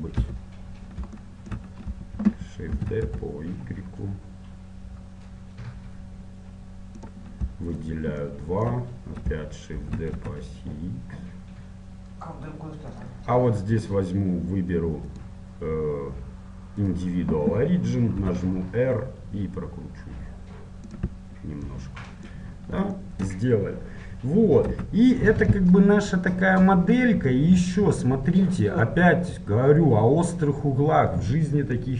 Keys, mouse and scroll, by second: 0.4 KP_7, 0.8-1.9 middle drag, 3.2 shift+d, 8.0-10.0 right drag, 10.0 shift+d, 18.4 r, 21.9-25.8 middle drag, 24.8 z, 28.7 middle click.